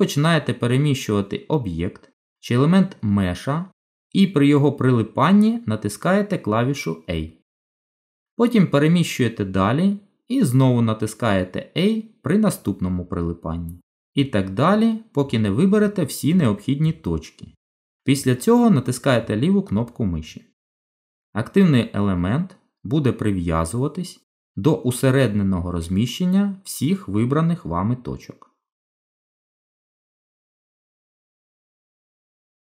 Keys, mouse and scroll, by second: 3.0 middle click, 8.1 g, 21.0 middle click, 29.8 ctrl+z, 30.8 middle click, 32.3 shift+middle click.